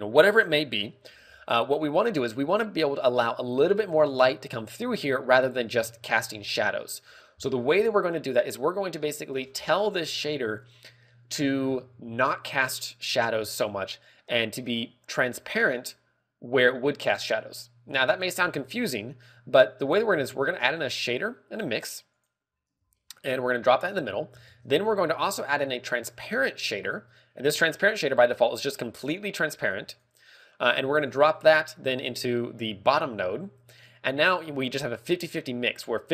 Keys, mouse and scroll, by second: 6.2-6.8 scroll down 4, 6.6 middle click, 7.5-8.0 scroll up 9, 8.2 middle click, 8.9 click, 9.5-10.3 scroll down 6, 18.5 click, 20.7 shift+a, 23.3 g, 24.4 g, 24.4 click, 25.0 shift+a, 26.8 g, 28.4 click, 30.1 click.